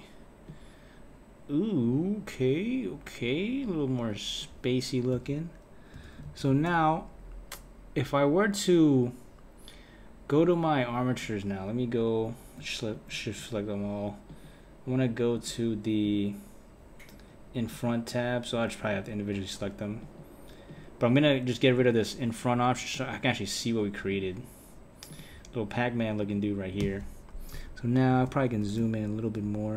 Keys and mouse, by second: 5.1 space, 6.0 space, 6.3 Left, 6.5 Left, 11.1 click, 12.9 shift+click, 14.3 click, 15.3 click, 16.0 click, 17.7 click, 18.9 click, 20.0 click, 20.7 click, 21.8 click, 22.9 click, 24.1 click, 25.1 click, 26.2 click, 26.7 click.